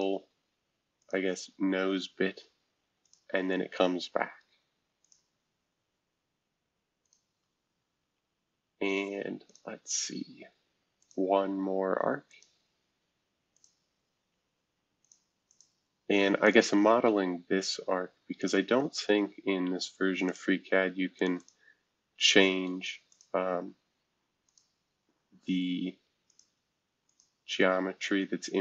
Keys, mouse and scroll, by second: 1.0 click, 3.0 click, 5.0 click, 7.0 click, 8.0 Escape, 9.4 click, 10.9 click, 12.3 click, 13.5 click, 14.2 Escape, 15.0 click, 15.5 click, 16.4 shift+click, 18.4 click, 20.2 click, 21.2 click, 21.4 click, 22.1 Escape, 23.1 click, 24.4 click, 26.3 click, 27.1 click.